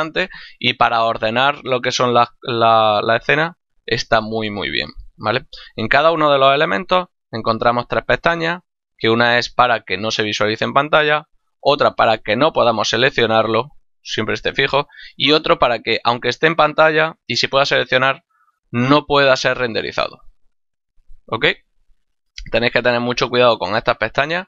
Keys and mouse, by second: 8.8 click, 11.3 click, 13.7 click, 15.5 click, 20.3 click.